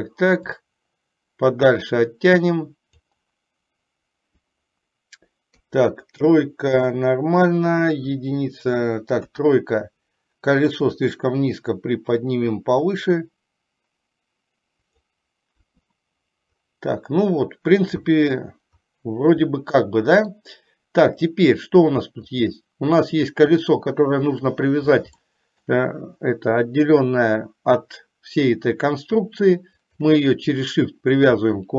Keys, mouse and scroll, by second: 0.8-3.4 drag, 5.7 KP_3, 8.2 KP_1, 9.4 KP_3, 11.4-15.3 drag, 15.8 KP_1, 19.7 middle click, 19.7 scroll up 1, 21.3 click, 22.5 click, 25.3 shift+middle click, 29.8 shift+click.